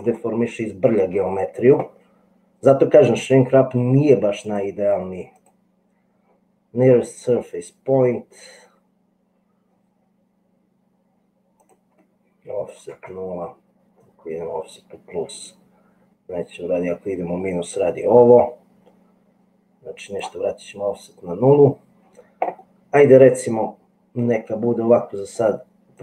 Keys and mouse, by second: 4.6-5.6 drag, 11.7-20.6 drag.